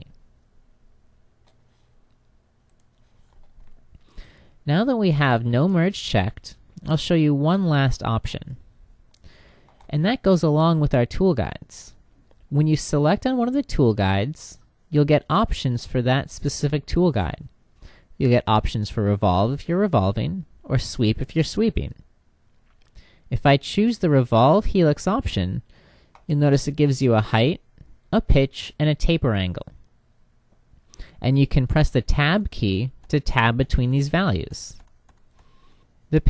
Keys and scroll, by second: 31.4 Tab.